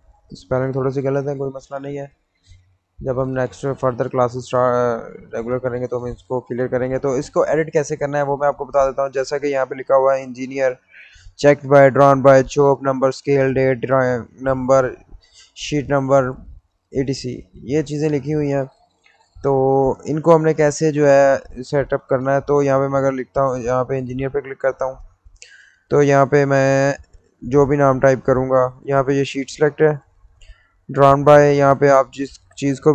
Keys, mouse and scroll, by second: 3.0-3.8 scroll down 1, 5.1-8.2 middle drag, 8.2-10.3 middle drag, 10.3-10.7 scroll down 1, 11.9 middle click, 12.3-13.2 scroll up 1, 14.0-17.1 middle drag, 17.5-20.1 middle drag, 20.1-21.6 scroll down 1, 23.1 middle click, 23.9 click, 26.9 click, 28.5-29.3 scroll up 1, 29.3 click, 31.2-32.9 scroll down 1.